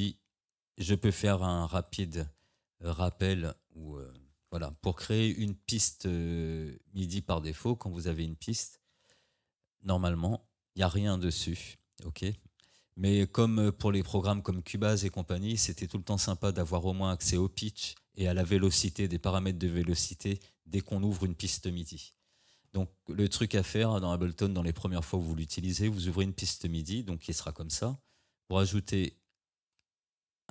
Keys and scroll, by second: 9.4 Delete.